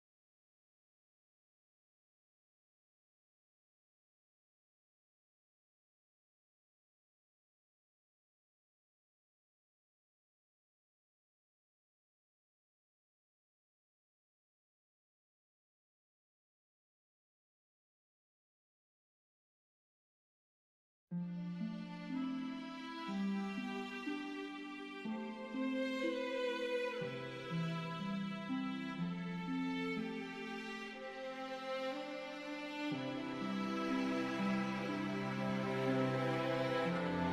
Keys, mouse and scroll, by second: 1.0 3, 2.9 click, 4.1 Delete, 4.8-6.6 scroll down 1, 9.2 scroll up 1, 11.4 click, 14.6 e, 20.7 click, 24.3 KP_1, 24.9 KP_Enter, 27.0 click, 31.9 KP_2, 33.4 KP_Enter, 34.6 right click, 36.2 click, 37.1-37.3 scroll down 1.